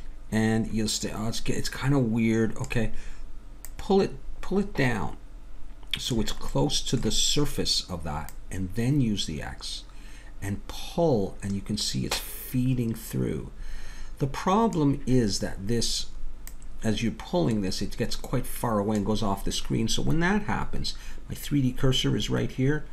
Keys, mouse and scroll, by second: 3.6-5.6 drag, 6.5-8.3 middle drag, 8.3-10.3 drag, 16.5-20.8 drag.